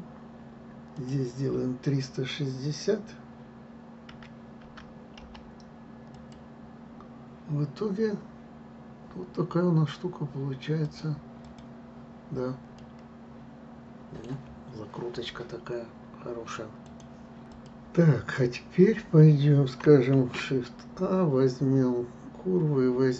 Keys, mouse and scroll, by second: 1.1-4.1 drag, 11.0-12.9 drag, 12.9-16.0 middle drag, 20.6 shift+a.